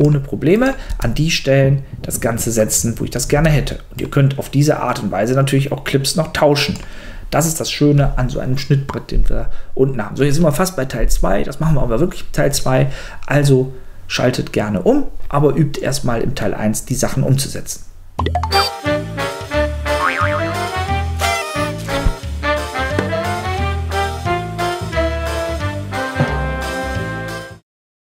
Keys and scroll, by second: 0.9 space, 3.3 space.